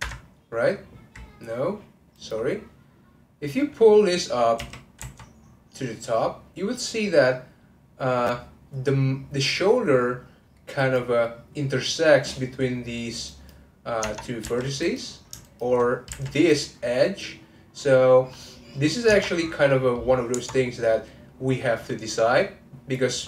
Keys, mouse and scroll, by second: 1.3 Escape, 2.8 click, 4.6 g, 13.2 click, 14.4 1, 14.8 click, 15.4 shift+click, 16.1 2, 16.3 click, 18.2-19.1 scroll down 1, 19.1 Tab, 19.7 middle click, 20.0-20.6 scroll down 2, 20.6 scroll up 1, 20.9 middle click, 21.8-22.3 scroll down 1.